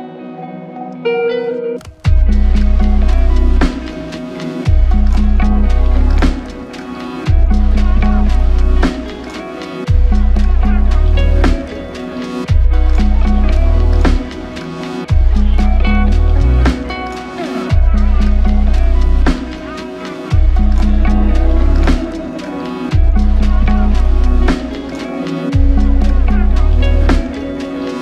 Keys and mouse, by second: 0.0 alt+l, 0.2 ctrl+click, 1.1 ctrl+i, 2.5 alt+click, 3.0 ctrl+click, 4.6 ctrl+click, 5.4 shift+click, 5.8 shift+double click, 6.0 shift+click, 8.0 ctrl+alt+click, 8.9 alt+click, 14.2 ctrl+alt+click, 16.3 alt+click, 17.5 alt+shift+click, 18.4 alt+click, 20.6 double click, 24.4 alt+click.